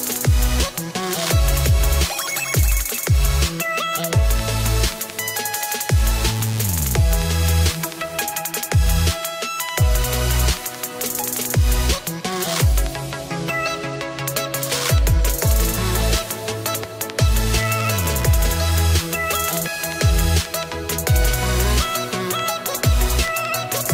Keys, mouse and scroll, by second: 0.3 click, 1.3 ctrl+c, 1.8 click, 3.4 ctrl+f, 3.8 click, 5.4 click, 9.2 ctrl+z, 10.1 click, 12.2 click, 19.0 click, 19.9 click, 20.6 click, 23.5 ctrl+d.